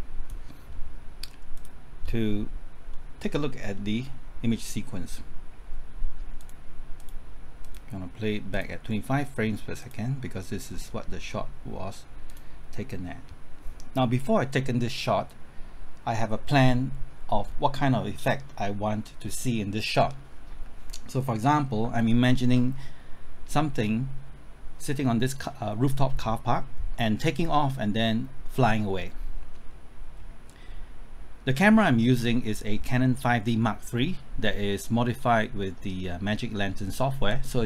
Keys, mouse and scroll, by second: 2.9-4.5 middle drag, 6.3-9.5 drag, 10.7 middle click, 12.2-37.6 drag.